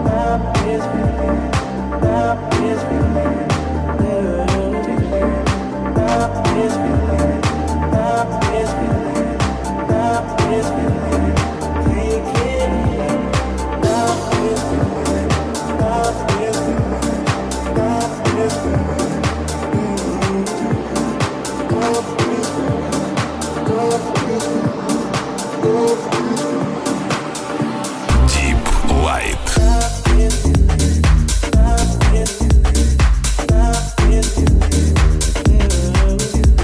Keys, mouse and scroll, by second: 0.7 shift+a, 1.0-6.2 drag, 3.5 shift+s, 3.7 middle click, 3.7 right click, 6.5 shift+click, 6.9-8.9 shift+drag, 8.9 shift+right click, 9.5 shift+right click, 10.7 shift+right click, 12.2 shift+click, 12.4-17.6 drag, 12.7 middle click, 12.7 right click, 13.8 w, 16.4 Tab, 17.8 shift+click, 18.3 shift+middle click, 18.6 ctrl+click, 19.3 click, 19.9 shift+middle click, 20.5 click, 20.9 shift+click, 21.4 shift+click, 22.3 shift+click, 22.9-27.4 drag, 25.6 ctrl+r, 27.4 shift+middle click, 27.9 alt+right click, 27.9-33.0 alt+middle drag, 33.0 alt+right click, 33.1-35.9 alt+middle drag, 35.9 right click, 35.9-36.6 shift+middle drag, 36.2 shift+s.